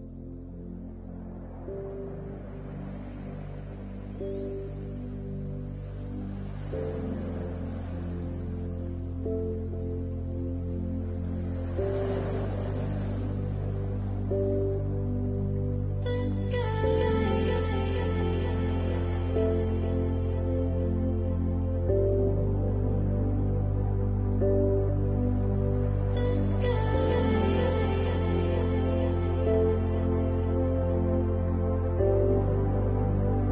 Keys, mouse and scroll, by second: 0.0 alt+shift+click, 0.5 middle click, 3.0 alt+shift+click, 3.5 middle click, 7.1-7.7 scroll up 6, 7.7 middle click, 9.0 shift+click, 9.6-10.3 scroll down 4, 10.0 middle click, 11.0 shift+middle click, 11.5 middle click, 12.3 shift+click, 13.1-14.0 scroll up 3, 14.4 shift+click, 14.8 middle click, 15.2 scroll down 3, 15.7 right click, 19.1 alt+shift+click, 20.0 right click, 21.3 ctrl+t, 22.6 alt+shift+click, 23.5 ctrl+z, 24.2 alt+shift+click, 24.8 right click, 27.8 l, 29.8 shift+middle click, 30.3-30.7 scroll down 2, 30.7 shift+middle click, 31.6 middle click, 32.9 Tab.